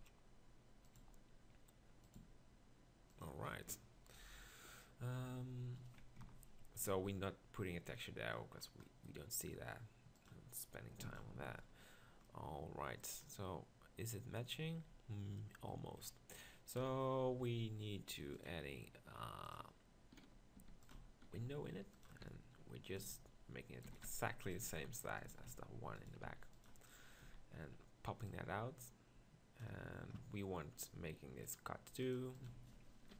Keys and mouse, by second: 1.0 g, 2.2 s, 5.3 Tab, 6.2 ctrl+KP_Decimal, 11.6-12.3 middle drag, 13.3-15.4 middle drag, 16.8 KP_1, 20.7-23.0 typing, 24.0 s, 25.3 s, 26.0 s, 27.3 z.